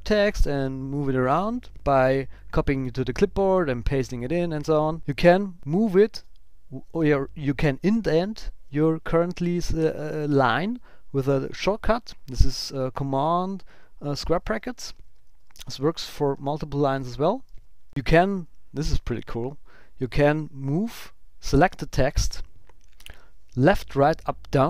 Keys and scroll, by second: 6.1 super+], 14.8 super+Left, 15.1 Up, 15.3 shift+Down, 16.0 super+[, 16.3 super+], 16.9 super+[, 17.8 Up, 17.9 Down, 19.0 Right, 20.8 shift+Right.